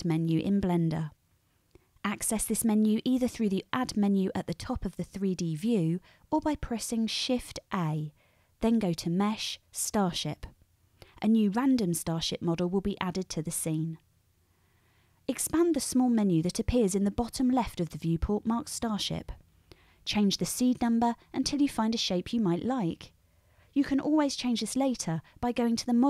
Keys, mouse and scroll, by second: 7.7 shift+a, 18.4-26.0 middle drag, 18.5-19.2 drag, 18.5-19.2 right drag.